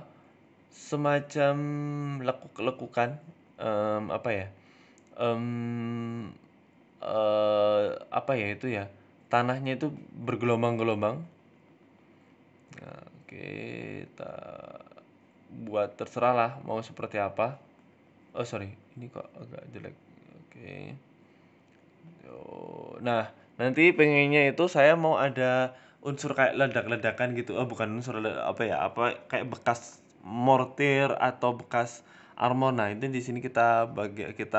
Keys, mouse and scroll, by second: 0.2 click, 1.3 click, 1.6 click, 2.2 ctrl+z, 2.4 ctrl+z, 2.6 ctrl+z, 2.9 middle click, 3.2-3.7 scroll down 2, 3.3 shift+middle click, 3.7 middle click, 4.0 click, 4.6 click, 5.3 click, 5.5 click, 6.1 click, 7.0 shift+middle click, 7.3 click, 7.8 click, 8.3 click, 9.9 ctrl+z, 10.0 click, 12.0 click, 13.1 ctrl+z, 13.2 click, 14.9 middle click, 15.2 shift+middle click, 15.6 click, 16.5 middle click, 17.4 ctrl+z, 17.6 click, 17.8 ctrl+z, 18.1 ctrl+z, 18.4 click, 18.9 ctrl+z, 19.0 click, 20.6 shift+middle click, 21.0 click, 21.9 shift+middle click, 22.2 click, 22.7 shift+middle click, 23.1 click, 24.9 shift+middle click, 25.1 click, 26.0 ctrl+z, 26.2 click, 27.0 shift+middle click, 27.2 middle click, 27.8 shift+middle click, 28.1 click, 29.2 ctrl+click, 30.2 ctrl+click, 33.7 middle click, 34.2 ctrl+click.